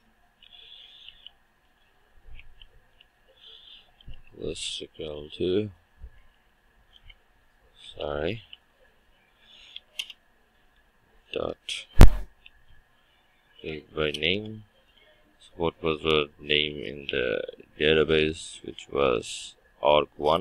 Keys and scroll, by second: 6.9 Return, 8.0 ctrl+w, 14.2 Return.